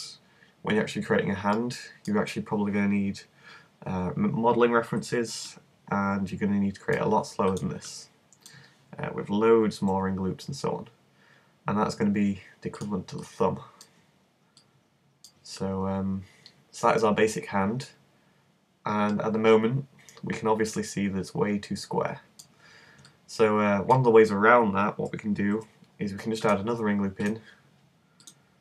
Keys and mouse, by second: 7.5-9.3 middle drag, 9.9 e, 12.9 click, 16.5 middle click, 17.2 middle click, 19.0-20.8 middle drag, 23.1-25.6 middle drag, 25.6 ctrl+r.